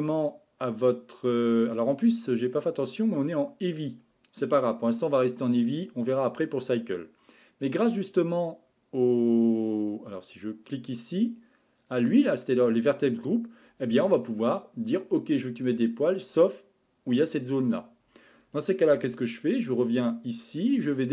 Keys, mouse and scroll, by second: 2.6 click, 10.3 click, 11.8 click, 15.8-18.0 scroll up 5, 20.0 click, 20.7-21.1 scroll down 13.